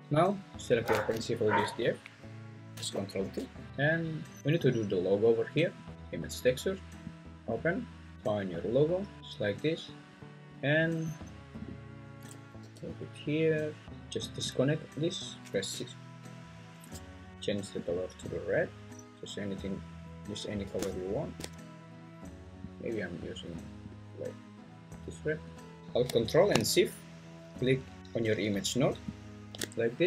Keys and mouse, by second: 1.1 g, 7.1 click, 11.6 drag, 11.9 click, 12.6 g, 14.3-15.0 drag.